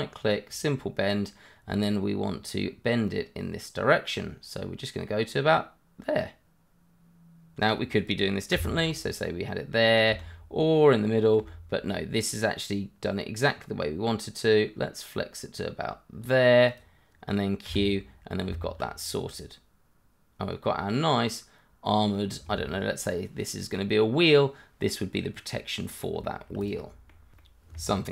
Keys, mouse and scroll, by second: 0.5 click, 3.0 click, 17.6 q, 17.9 scroll down 1, 18.4 Tab, 19.0 click, 19.3 middle click, 22.3 Tab, 22.5 click, 22.9 i, 23.2 click, 23.4 e, 23.7 click, 23.8 i, 24.1 click, 24.5 i, 25.8 click, 26.0 i, 26.4 click, 26.5 e, 27.0 click, 27.1 s, 27.6 click, 27.7 Tab, 28.0 middle click.